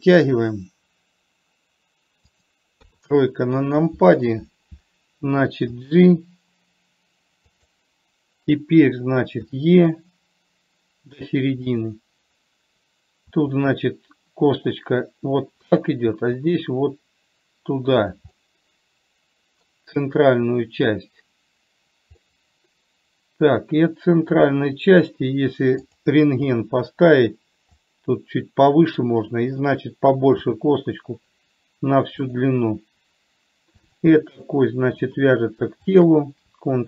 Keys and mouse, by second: 3.1 KP_3, 6.0 g, 9.7 e, 13.6 e, 16.5 e, 18.6-20.0 middle drag, 22.5-24.7 middle drag, 26.2 click, 26.9 KP_3, 28.2-29.4 drag, 30.7 e, 34.2 click, 34.7 middle click, 36.2 shift+click.